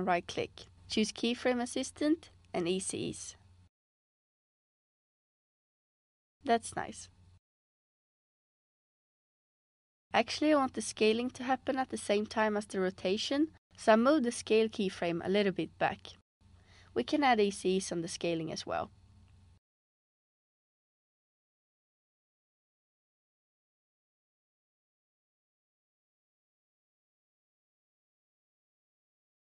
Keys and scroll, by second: 5.2 space, 6.8 space, 21.6 space, 24.7 space.